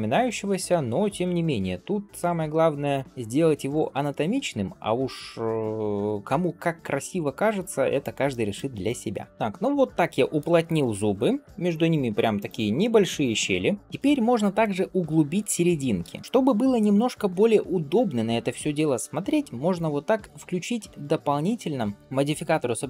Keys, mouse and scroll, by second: 0.5 g, 1.6 click, 2.4 middle click, 3.0 g, 3.9 shift+middle click, 4.4 middle click, 5.0 click, 6.3 g, 7.4 click, 8.1 middle click, 8.7 g, 9.3 scroll down 1, 9.5-10.2 middle drag, 10.5 click, 11.1 scroll up 2, 11.4 middle click, 12.2 click, 12.7-13.4 middle drag, 13.6 scroll down 2, 13.8 middle click, 13.8 scroll up 2, 14.7-15.6 scroll down 1, 16.0 ctrl+space, 16.2-17.0 scroll up 1.